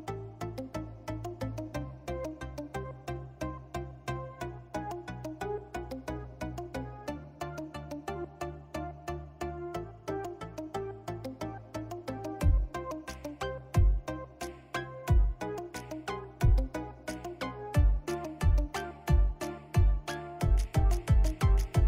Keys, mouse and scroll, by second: 7.0-11.3 drag, 11.3 ctrl+z, 12.7-13.5 typing, 14.1-21.8 drag.